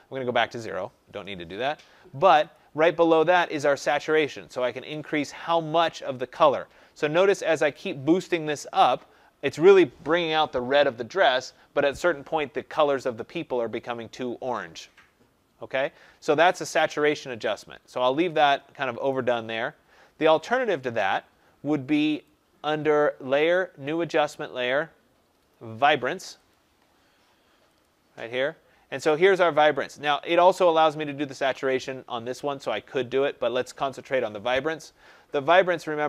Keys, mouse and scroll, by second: 0.6 click, 1.0 0, 2.4 click, 19.0 click, 20.5 click, 22.2 click, 26.4 click, 32.8 click.